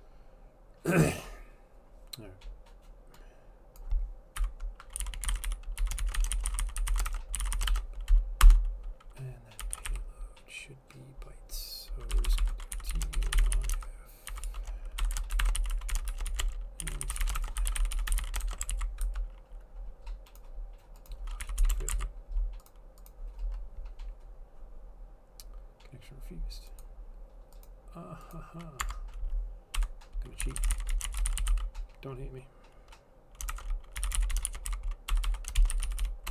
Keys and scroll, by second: 4.5 Delete, 4.8-8.3 typing, 8.5 Return, 9.4-10.4 typing, 12.2-19.6 typing, 21.3-22.0 typing, 28.9 Tab, 29.8-32.1 typing, 33.3-36.3 typing.